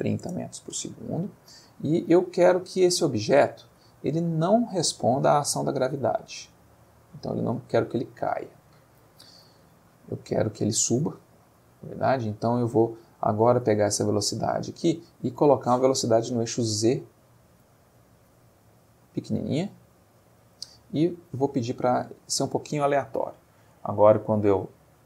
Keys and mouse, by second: 0.3 Return, 2.4-3.7 middle drag, 3.8 middle click, 4.4 middle click, 6.6-8.7 drag, 9.9 middle click, 10.9-11.4 middle drag, 11.5 middle click, 12.3 middle click, 18.6 click, 19.5 click, 21.1 click, 23.7 space.